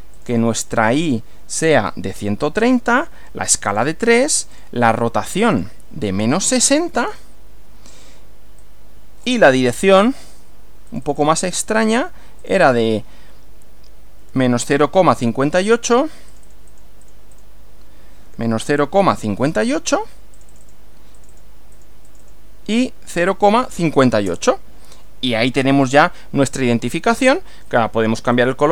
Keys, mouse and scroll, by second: 0.2 click, 2.0-3.4 typing, 3.7 click, 4.2 click, 5.2 click, 6.3-7.5 typing, 8.6-9.4 drag, 10.2 click, 10.9 click, 11.7 click, 12.4 click, 14.1-15.7 typing, 16.3-17.6 drag, 18.0-19.7 typing, 20.4 click, 21.2 click, 21.7 click, 22.9-24.1 typing, 24.2 Return, 27.2-27.8 drag, 28.3 click.